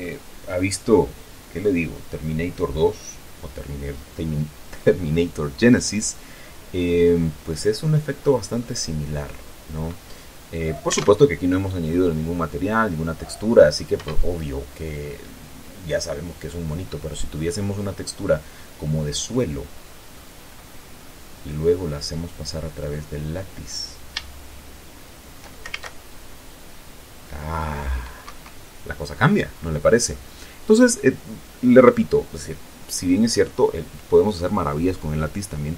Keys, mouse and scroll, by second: 9.0-11.3 drag, 11.3 alt+a, 14.3 Escape, 19.7-20.9 middle drag, 20.9-21.5 scroll up 1, 21.8-23.5 drag, 23.5-24.1 scroll up 1, 24.1 scroll up 1, 24.5-26.0 shift+middle drag, 26.0 alt+shift+a, 28.6 Escape, 29.3-30.3 scroll down 2, 30.5-32.9 drag.